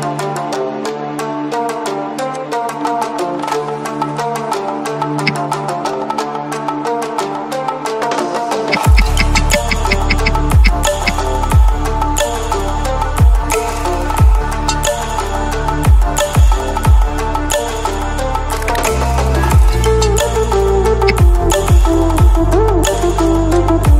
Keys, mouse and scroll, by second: 2.3-5.2 drag, 5.2 v, 6.4-8.6 alt+drag, 8.6 ctrl+d, 12.8-15.0 drag, 18.3-19.6 shift+drag, 21.0 ctrl+0, 22.8 click, 23.5 shift+click.